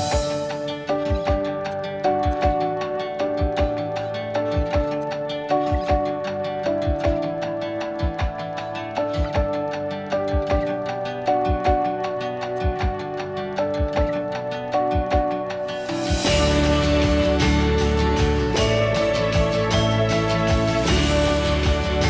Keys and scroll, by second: 9.5 Escape, 9.6 Escape, 16.8 8, 17.9 Return.